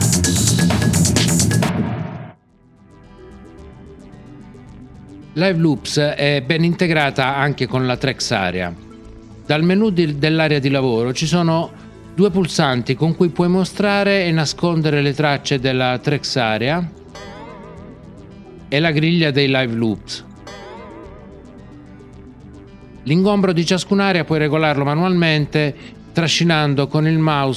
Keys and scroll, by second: 17.1 alt+n, 20.4 alt+l.